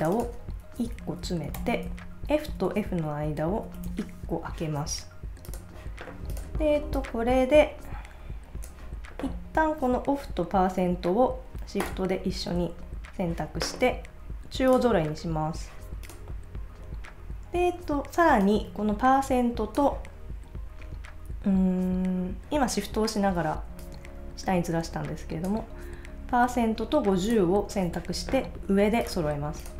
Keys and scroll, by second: 0.8 Left, 0.9 Right, 1.6 alt+Left, 2.5 Right.